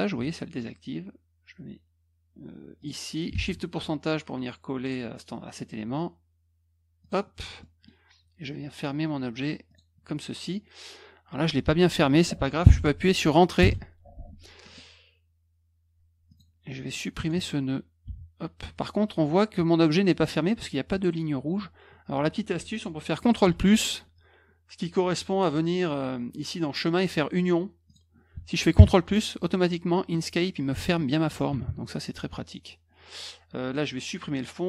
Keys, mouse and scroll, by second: 2.8 click, 3.3 shift+ù, 7.0 click, 7.6 middle click, 9.6 click, 13.6 Return, 16.2 click, 16.9 click, 25.1 click, 27.8 click, 32.3 middle click, 34.3 click.